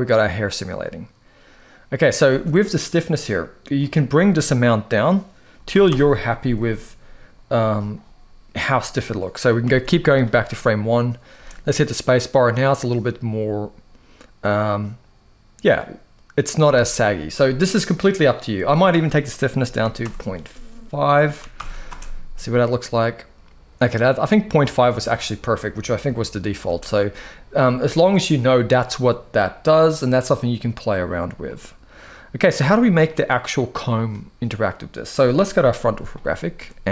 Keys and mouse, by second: 2.0 space, 3.5-5.6 drag, 9.3 shift+Left, 11.1 space, 16.3 space, 18.4-19.8 drag, 21.3 shift+Left, 21.6 space, 26.4 space, 26.8-27.2 middle drag, 31.2-32.1 middle drag, 32.8 click, 33.2-34.1 middle drag, 35.3 KP_1, 36.1-36.4 shift+middle drag.